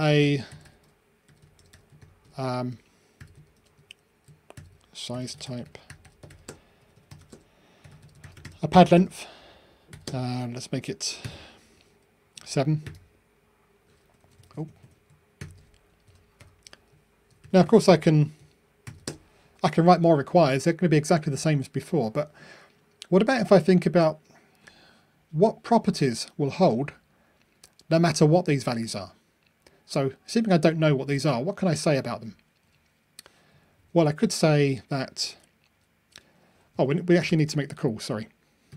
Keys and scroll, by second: 2.3 shift+Return, 6.3 shift+Return.